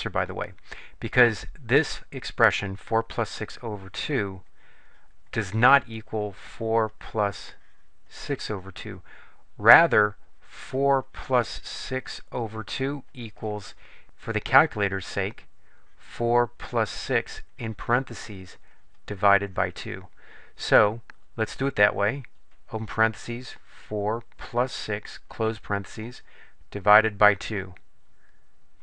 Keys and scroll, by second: 22.2 (, 23.5 4, 24.9 6, 25.5 ), 26.3 ÷, 27.0 2, 27.7 Return.